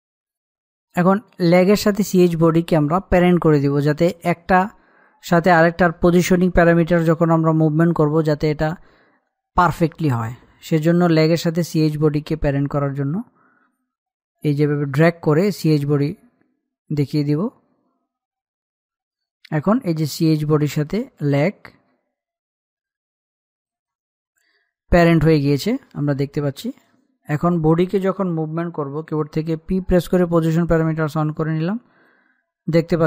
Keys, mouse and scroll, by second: 15.6-24.8 drag, 27.3 click, 30.3 p, 31.5-33.0 drag.